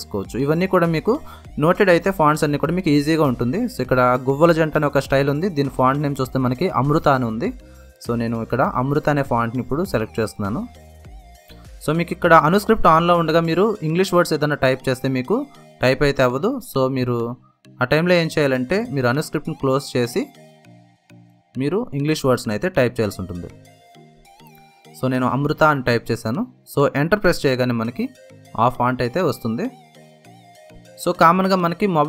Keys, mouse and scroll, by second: 9.5 click, 11.6-12.5 typing, 15.7 click, 15.7 typing, 18.1-19.0 typing, 19.0-24.1 drag, 24.7-27.2 typing, 28.9 Return, 30.3 ctrl+z, 31.9 ctrl+z, 31.9 typing.